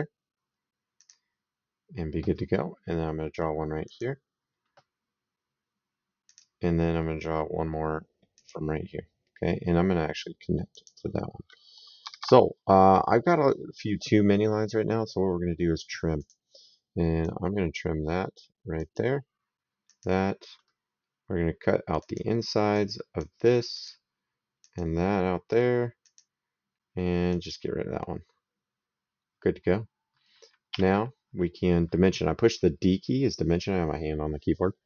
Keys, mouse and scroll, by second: 0.8 click, 3.7 click, 6.1 click, 8.2 click, 10.5 click, 11.8 Escape, 16.0 click, 17.1 click, 18.6 click, 19.7 click, 21.8 click, 25.9 click, 27.1 click, 30.5 d.